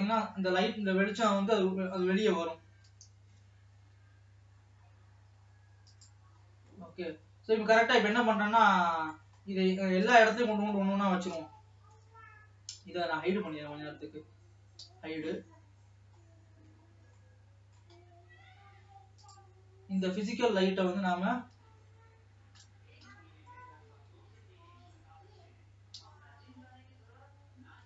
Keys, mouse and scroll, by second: 2.6 g, 6.9 scroll down 2, 7.3-8.6 middle drag, 8.6-9.3 scroll down 6, 9.3 middle click, 10.1-10.4 scroll up 5, 10.4 click, 11.9 Tab, 13.0 scroll down 1, 13.2 l, 13.6 l, 14.4 l, 15.2 h, 16.2-16.7 scroll up 4, 17.0 Tab, 17.2 scroll down 2, 17.4 middle click, 18.4 scroll up 3, 19.7 click, 21.7 KP_3, 23.1 ctrl+KP_3, 24.3 KP_3, 27.1-27.8 scroll down 4.